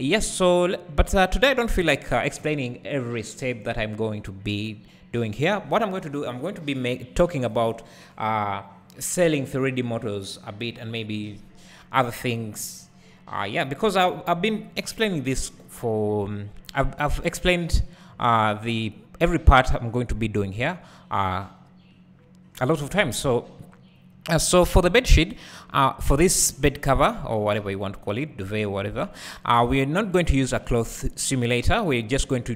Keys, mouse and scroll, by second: 0.3 `, 1.8 KP_1, 3.0-7.0 scroll up 2, 17.3-23.5 drag, 18.1-22.3 scroll up 2, 23.5-24.2 scroll down 2, 24.2 `, 24.8-28.7 scroll up 2, 28.7 scroll up 1.